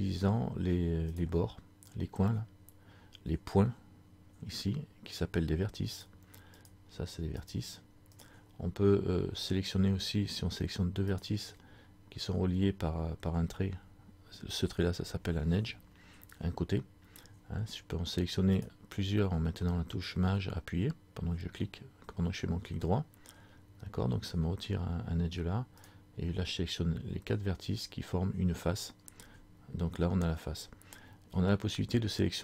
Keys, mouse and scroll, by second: 1.2 right click, 6.0 right click, 11.2 right click, 11.5 shift+right click, 18.7 shift+right click, 25.9 shift+right click.